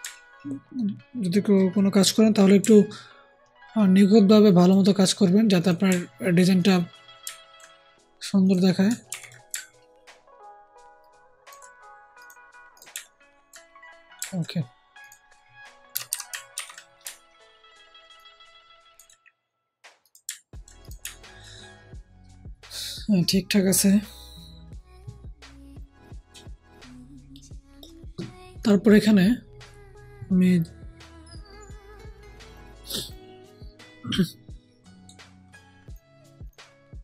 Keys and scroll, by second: 9.0 ctrl+t, 15.8 Down, 16.0 Down, 16.5 ctrl+t, 17.0 ctrl+alt+t.